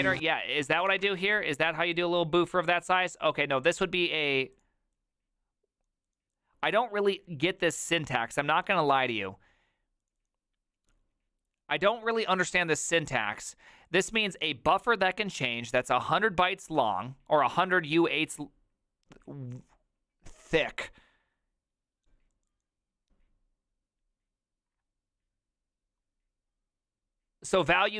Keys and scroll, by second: 0.0-1.3 typing.